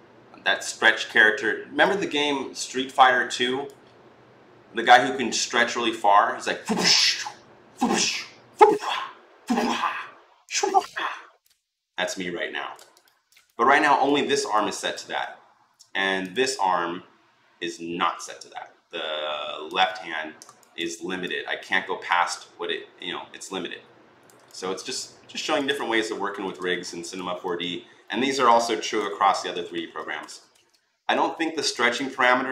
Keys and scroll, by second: 25.8 ctrl+z, 26.1 ctrl+z, 29.0 ctrl+z, 29.3 ctrl+z, 29.5 ctrl+z, 30.1 ctrl+z.